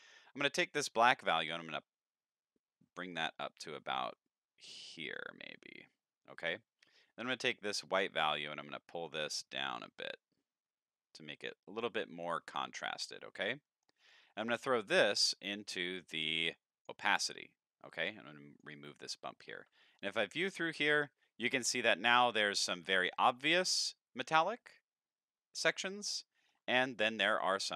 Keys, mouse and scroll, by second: 0.4-5.1 drag, 7.2-12.0 drag, 12.9 middle click, 13.4-13.8 scroll up 3, 13.7 middle click, 14.7-16.9 drag, 18.1-18.6 drag, 19.0 middle click, 20.0 ctrl+shift+click, 21.2-22.2 middle drag, 22.7 scroll up 3, 23.0 shift+middle drag, 26.0-26.5 shift+middle drag, 26.8 middle drag, 27.5-27.7 scroll down 4.